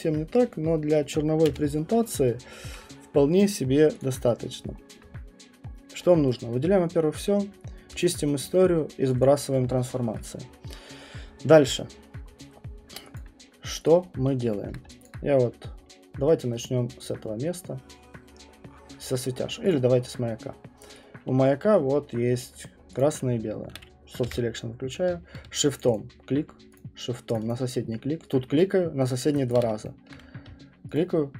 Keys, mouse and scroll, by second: 1.5 space, 2.2 alt+click, 2.2 alt+middle click, 2.3 middle click, 2.4 alt+middle click, 4.0 click, 4.3 middle click, 4.6 middle click, 5.0 middle click, 5.7 middle click, 6.4 click, 6.4 scroll, 8.0 click, 9.2 click, 10.2 click, 10.7 scroll, 11.9 middle click, 11.9 middle click, 12.5 middle click, 12.9 middle click, 13.2 alt+click, 13.4 middle click, 13.9 middle click, 13.9 click, 14.1 middle click, 17.1 click, 19.7 click, 19.9 middle click, 20.1 middle click, 22.4 right click, 23.0 click, 24.2 b, 25.8 shift+click, 25.9 shift+click, 26.8 shift+click, 27.3 shift+click, 27.5 shift+click, 30.1 alt+middle click, 31.0 shift+click.